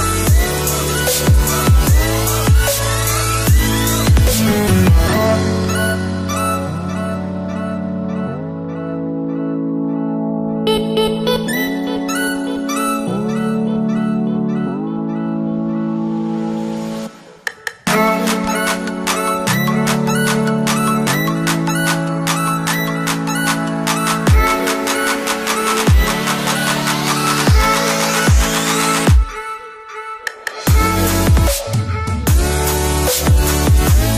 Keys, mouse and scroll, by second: 1.0 click, 9.7 click, 11.5 shift+click, 16.1 right click, 17.3 click, 22.9 click, 25.4 right click, 27.4 click, 29.1 Up.